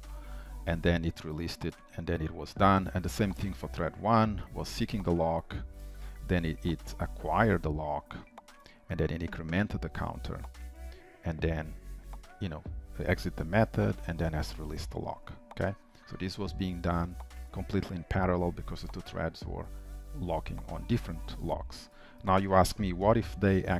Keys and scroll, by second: 23.1 ctrl+shift+F12.